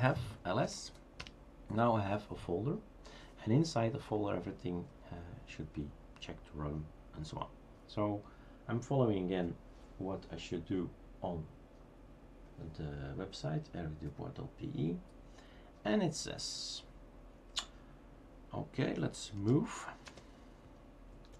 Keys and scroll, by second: 0.4-1.3 typing, 19.1-20.0 typing.